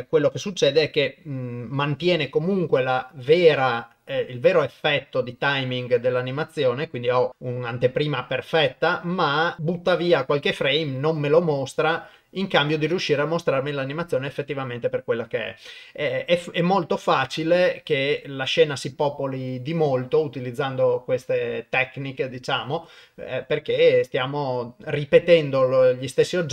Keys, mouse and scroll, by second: 5.5 click.